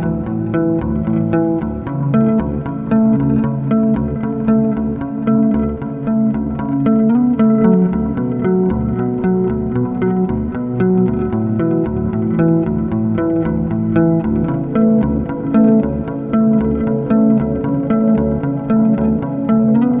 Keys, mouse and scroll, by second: 0.0 middle click, 0.3-2.6 shift+middle drag, 2.6 scroll down 1, 2.7-3.4 middle drag, 3.4 scroll up 2, 3.5-6.2 middle drag, 6.2 m, 7.8 scroll down 4, 8.0 g, 15.2 scroll down 1, 15.4-17.8 middle drag, 17.8-18.3 scroll down 3, 18.3 shift+d.